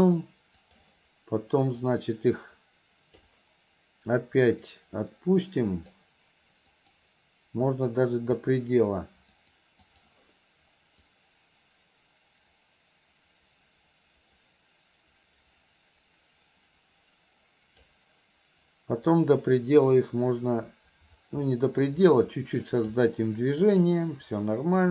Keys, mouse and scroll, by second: 0.7 click, 2.0-3.4 drag, 4.7-6.0 drag, 6.8 click, 7.7 click, 9.4 click, 9.9-18.0 drag, 19.1-23.0 drag, 23.7 click.